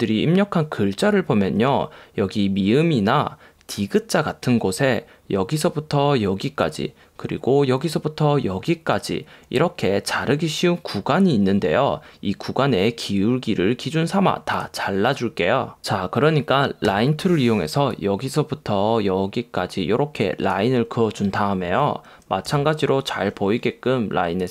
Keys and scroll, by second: 17.0 \.